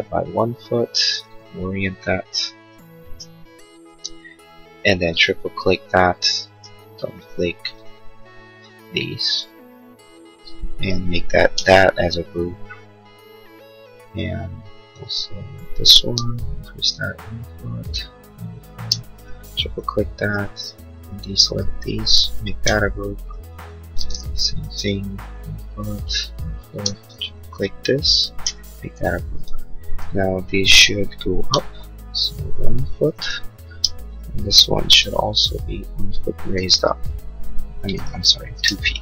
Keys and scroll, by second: 1.0 space, 16.2 p, 18.9 space, 22.7 g, 26.7 space, 28.6 g, 32.9 1, 33.1 Return, 33.6 space, 35.0 m, 36.5 1, 36.7 Return, 37.8 2, 38.0 Return, 38.6 space.